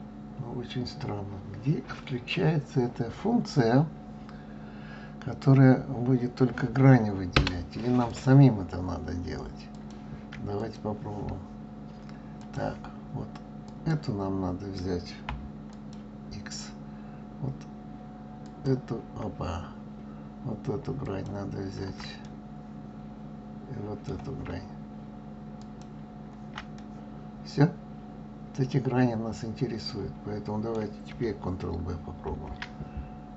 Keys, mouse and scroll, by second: 8.1 click, 9.7 click, 10.6 click, 12.4-13.9 drag, 15.7 alt+click, 18.4 alt+click, 21.0 alt+shift+click, 22.2-25.2 middle drag, 25.6 alt+shift+click, 26.8-29.8 middle drag, 32.3 ctrl+b.